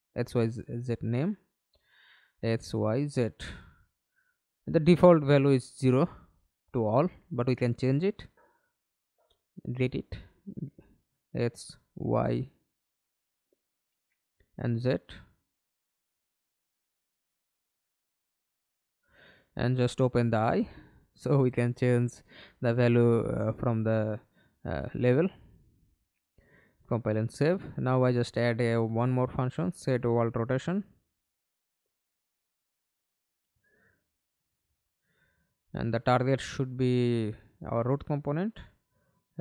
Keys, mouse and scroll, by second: 1.7 ctrl+d, 2.4 ctrl+i, 2.7 shift+y, 3.1 Return, 3.8 ctrl+d, 4.7 shift+x, 5.2 BackSpace, 6.5 BackSpace, 7.0 shift+z, 7.5 Return, 9.4 double click, 12.8 double click, 15.8 double click, 19.5 double click, 26.7 right click, 30.0-33.7 typing, 33.9 Down, 34.0 Down, 34.4 Return, 36.5 right click, 37.2 scroll down 1, 37.5 right click.